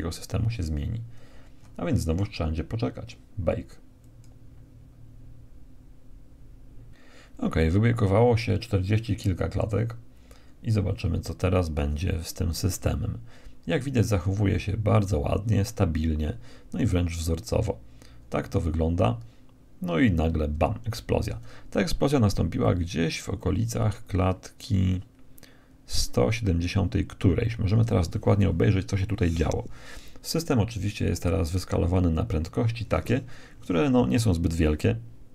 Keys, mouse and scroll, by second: 1.1-3.4 middle drag, 3.4-6.1 drag, 6.3 click, 6.9 Escape, 10.6 alt+a, 19.4 Escape, 21.5-23.5 drag, 29.3-32.2 middle drag, 29.3-31.1 scroll down 1, 32.4-34.9 middle drag, 34.9-35.3 drag.